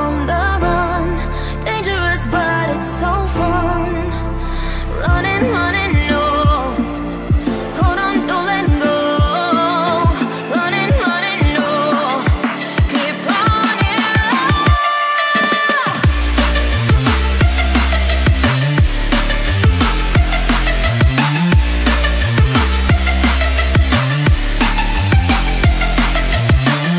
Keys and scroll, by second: 1.2 ctrl+t, 5.0 Return, 6.4 ctrl+t, 12.0 Return, 17.6 Delete.